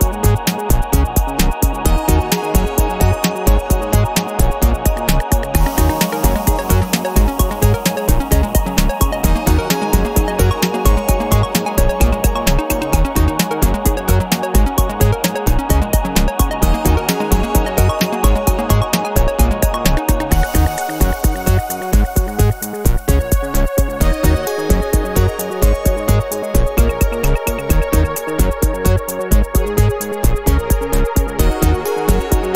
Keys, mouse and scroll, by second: 1.8 ctrl+click, 2.4 ctrl+click, 2.8 ctrl+click, 4.1 click, 5.5 click, 7.1 click, 8.2 click, 9.3 click, 9.7-12.1 middle drag, 12.3 o, 12.7 scroll down 2, 13.3-13.8 scroll up 2, 14.0 scroll down 2, 14.5 scroll up 2, 15.7 click, 16.5 space, 17.2 click, 18.3-19.8 drag, 20.7 click, 21.7 click, 24.1 click, 26.1 click, 27.0 KP_1, 27.3 KP_0, 28.7 click, 29.6 KP_2, 29.8 KP_0, 31.1 click, 31.9 KP_1, 32.1 KP_0.